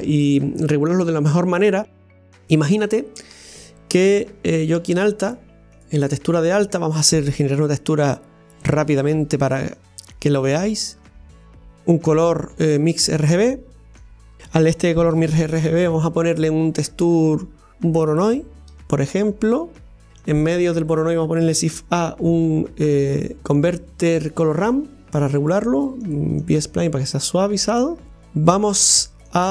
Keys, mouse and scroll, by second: 2.2-4.9 middle drag, 4.9 drag, 5.9 click, 9.9-20.1 drag, 21.1-25.4 drag, 26.5-29.3 drag.